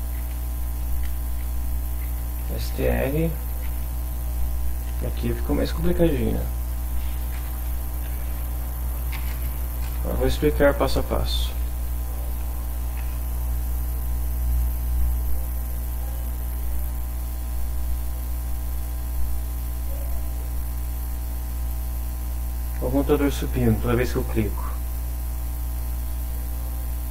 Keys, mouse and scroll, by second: 1.2-3.8 typing, 4.3 shift+Up, 4.9 shift+Home, 5.3 shift+Right, 7.4 ctrl+shift+c, 7.6 ctrl+shift+Down, 8.0 ctrl+shift+End, 8.2 ctrl+shift+Left, 9.2 space, 9.5 Left, 9.8 ctrl+v, 11.0 BackSpace, 11.6 Down, 16.5 F5, 18.7 click, 19.9 click, 20.3 click, 21.0 click, 21.6 click, 22.0 click, 22.9 click, 24.1 click, 26.2 click.